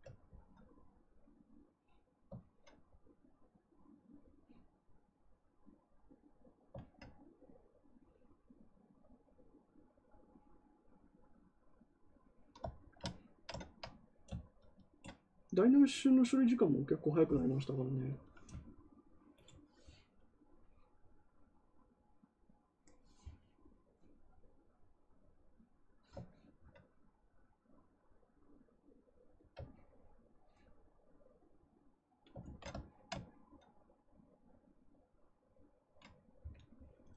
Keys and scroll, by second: 32.3 ctrl+z.